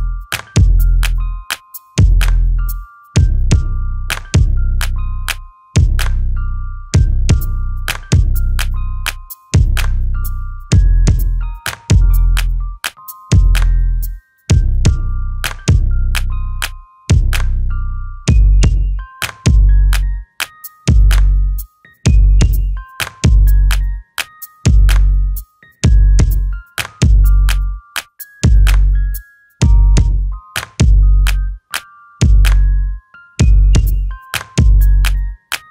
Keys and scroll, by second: 1.2 ctrl+z, 2.7 space, 3.5 Delete, 5.7 alt+t, 10.0 m, 20.4 ctrl+z, 20.9 space, 21.5 m, 25.3 alt+t, 25.8 space, 28.0 shift+f, 28.5 space.